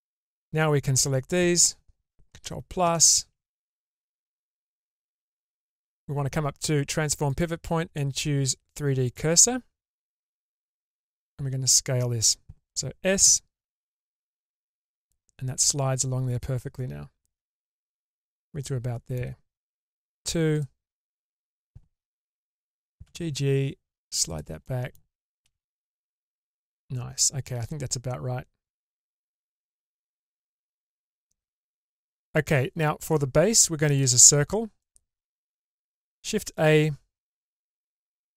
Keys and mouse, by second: 0.4 click, 2.3 ctrl+KP_Add, 2.8 ctrl+KP_Add, 7.3-9.1 drag, 11.1 middle click, 13.2 s, 18.6 middle click, 19.8 2, 20.6 alt+click, 23.0 g, 24.6 middle click, 25.5 alt+z, 26.0-31.5 middle drag, 31.9 shift+middle click, 33.9 Tab, 34.8-35.2 shift+middle drag, 36.2 shift+a.